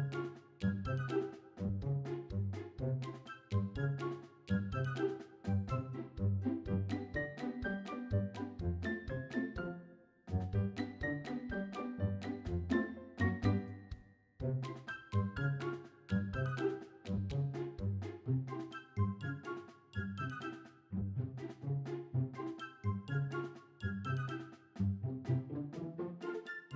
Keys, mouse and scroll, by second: 0.7 click, 1.7 click, 4.1-7.0 drag, 8.5 click, 9.6 click, 11.2 click, 12.9-15.1 drag, 16.3 click, 17.3 click, 18.3 click, 19.4 middle click, 20.4 scroll up 1, 20.9 shift+middle click, 21.7 middle click, 22.8 click, 25.2 click.